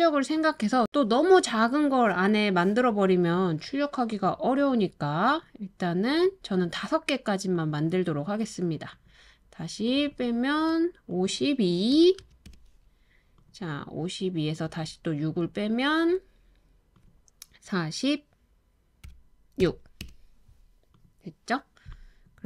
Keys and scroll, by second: 11.9 typing, 12.4 Return, 19.1-19.6 typing, 20.0 Return.